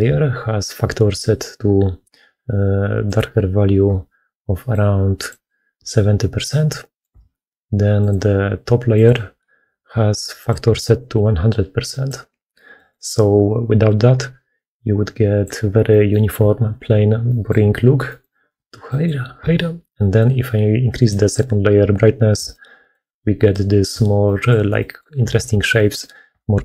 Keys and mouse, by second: 8.9-10.4 drag, 14.5-22.3 drag.